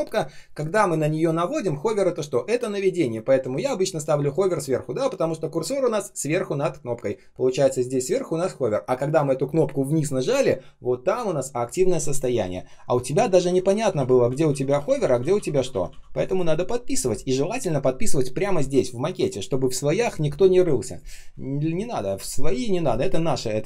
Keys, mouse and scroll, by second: 13.2 ctrl+z, 21.3-22.4 ctrl+scroll down 1.